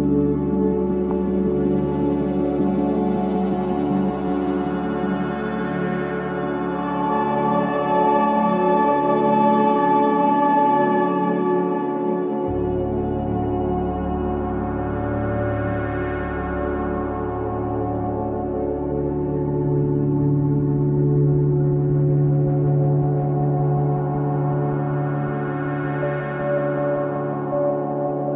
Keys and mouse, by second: 3.0 g, 5.1 Tab, 8.1-13.9 right drag, 16.5 Tab, 16.9 Tab, 17.6 3, 18.8 click, 19.6 shift+click, 20.1 shift+click, 20.7 shift+click, 21.5 shift+click, 22.2 shift+click, 24.3 shift+click, 24.9 shift+click, 25.6 shift+click, 26.2 shift+click.